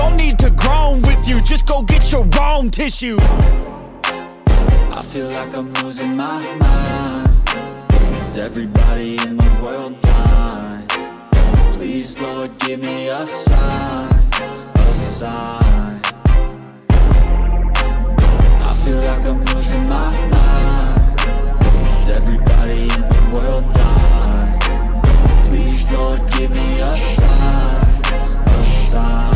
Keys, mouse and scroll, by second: 0.0-4.8 typing, 0.2 click, 0.3 shift+middle click, 0.8 click, 1.8 click, 2.6 click, 3.1 click, 3.3 click, 3.6 click, 4.1 click, 4.1 shift+middle click, 4.7 click, 5.0 shift+click, 5.1 scroll down 1, 5.4 shift+middle click, 5.5 scroll up 1, 6.0 click, 6.4 s, 6.6 scroll down 1, 6.8-7.5 scroll up 2, 6.9 shift+middle click, 7.0 i, 7.3 shift+click, 7.6 i, 7.9 shift+click, 8.1 alt+s, 8.5 shift+click, 8.6 scroll up 1, 8.7 middle click, 8.8 e, 9.1 click, 9.2 scroll up 1, 9.6 i, 9.8 shift+click, 9.9 middle click, 10.3 click, 10.8 middle click, 11.0 a, 11.3 click, 11.6 middle click, 12.0 x, 12.3 ctrl+z, 12.4 click, 12.6 3, 12.7 click, 12.9 3, 13.3 click, 13.6 middle click, 13.8 scroll down 1, 14.1 middle click, 14.3-17.1 typing, 14.5 click, 14.8 middle click, 15.0 scroll up 1, 15.1 click, 15.1 middle click, 15.3 click, 15.6 click, 15.9-16.3 scroll up 2, 16.0 middle click, 16.6 alt+click, 16.8 middle click, 17.1 alt+shift+click, 17.3 scroll up 2, 17.5 alt+shift+click, 17.8 alt+shift+click, 18.0 alt+click, 18.1-21.3 typing, 18.5 click, 18.8 alt+click, 18.8 alt+shift+click, 19.1 alt+click, 19.3 middle click, 19.7 right click, 20.0 click, 20.2 scroll down 1, 20.3 middle click, 20.7 shift+click, 21.1 shift+click, 21.2-21.9 scroll down 3, 21.7 click, 22.0 click, 22.1 scroll up 1, 22.7 click, 24.5 click, 25.1-26.5 typing, 25.5 click, 25.6 shift+middle click, 25.9 ctrl+click, 26.2 click, 26.5 scroll up 1, 26.6 right click, 26.8 click, 26.9 shift+middle click, 27.1 click, 27.3 middle click, 27.5 click, 27.7 scroll up 1, 27.8 click, 28.4 g, 28.5 click, 28.6 Tab, 28.8 middle click, 29.1 Tab, 29.1 shift+s.